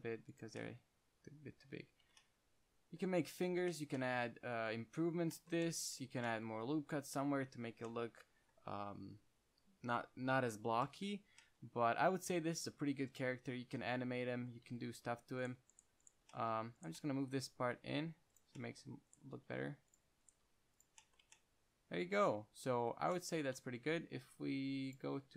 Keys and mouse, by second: 2.3 Tab, 6.4 Tab, 8.0 Tab, 13.1-13.6 middle drag, 15.0 Tab, 15.2-16.6 middle drag, 17.5 g, 18.7-19.1 drag, 19.4 drag, 19.7 g, 20.6 g, 21.5 Tab, 22.2-23.0 middle drag, 23.9 Tab, 24.1 a, 24.3 a, 25.2-25.3 drag.